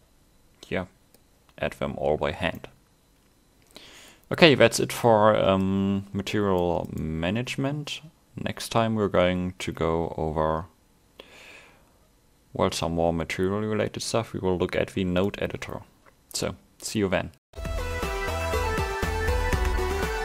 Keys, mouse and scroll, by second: 2.4 scroll down 1, 2.6 middle click.